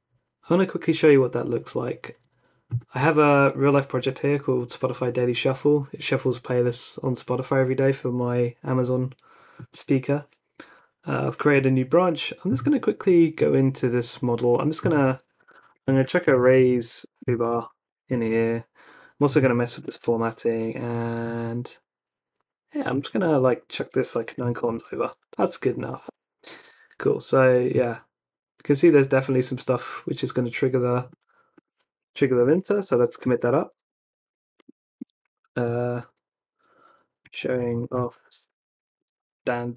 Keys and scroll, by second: 15.1 Escape, 15.4-18.8 typing, 19.5 Escape, 19.8 o, 19.9 Escape, 19.9 o, 20.0 Escape, 23.0 shift+v, 24.3 9, 24.6 shift+., 25.0 super+s, 31.9-34.4 typing, 37.0-39.7 typing.